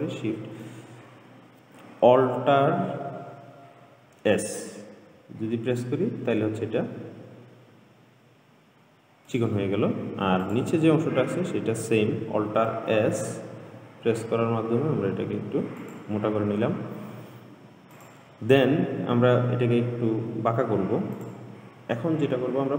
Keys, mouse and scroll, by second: 0.2-3.3 shift+middle drag, 5.4 alt+s, 10.7 click, 13.0 alt+s, 18.2 click, 21.4 click.